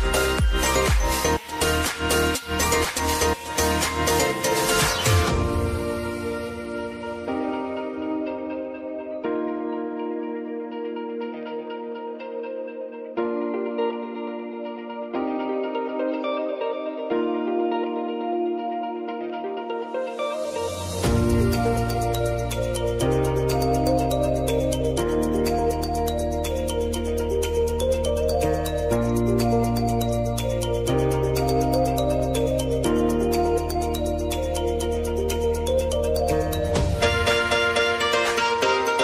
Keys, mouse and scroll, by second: 0.0 s, 0.5-2.1 drag, 2.4 Return, 3.0 typing, 4.2 Return, 5.9-11.2 drag, 11.2 v, 12.9-14.9 drag, 16.4 ctrl+d, 16.9-32.4 drag, 36.4 click, 37.0 ctrl+d, 38.6 click.